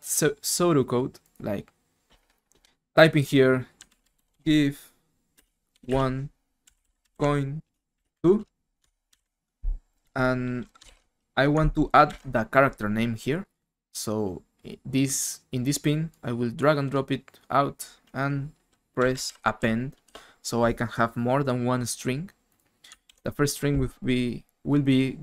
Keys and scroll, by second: 3.6-9.6 typing, 10.8 shift+Home, 12.1 ctrl+c, 18.7-20.1 typing, 23.0 ctrl+v.